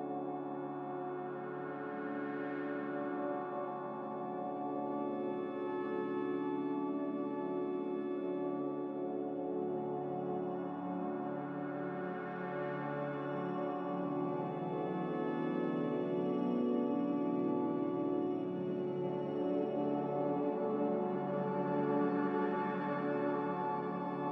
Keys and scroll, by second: 2.7-3.6 typing, 4.7-5.4 typing, 7.2-7.9 typing, 9.6 c.